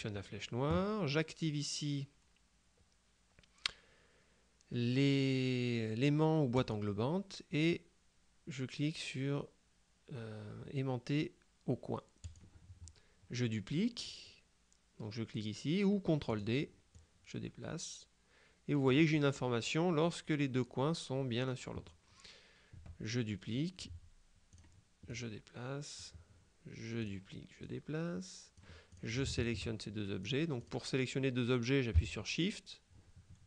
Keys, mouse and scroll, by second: 6.7 click, 12.3 click, 16.4 click, 24.6-26.5 drag, 27.1 click, 27.7-30.0 drag, 30.3-31.3 drag.